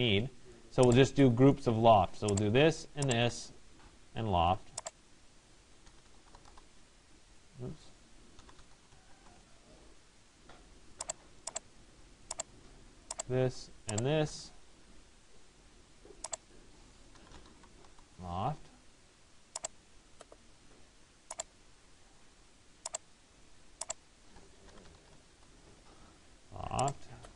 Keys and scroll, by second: 6.2 Return, 17.6 Return, 24.9 Return.